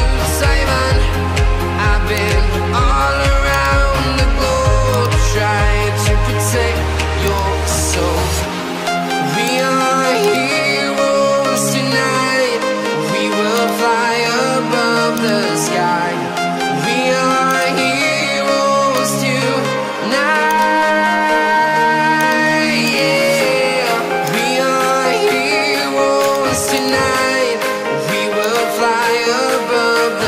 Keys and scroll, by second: 5.7 Return, 12.9 ctrl+z.